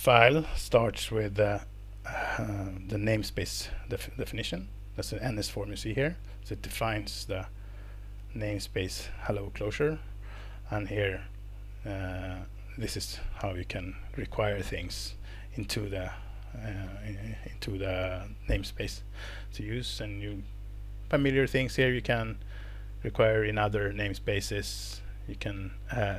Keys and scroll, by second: 16.7 scroll down 1.